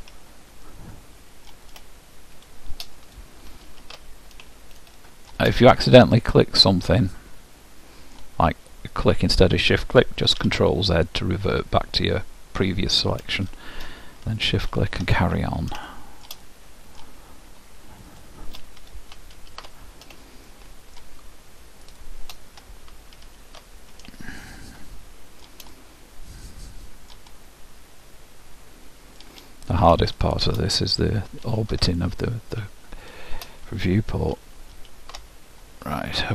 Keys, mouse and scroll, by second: 0.8 ctrl+alt+shift+middle click, 1.2-2.5 ctrl+alt+shift+middle drag, 2.5-4.2 ctrl+alt+shift+drag, 4.8-7.6 ctrl+alt+shift+middle drag, 9.1-10.9 drag, 10.5 ctrl+z, 13.6-15.4 drag, 16.0 ctrl+alt+shift+middle click, 18.2-20.0 drag, 20.6-22.0 ctrl+alt+shift+middle drag, 22.0-23.9 ctrl+alt+shift+drag, 24.5-29.2 ctrl+alt+shift+middle drag, 30.2-32.0 drag, 33.2-35.0 ctrl+alt+shift+drag, 36.2-36.3 scroll up 1.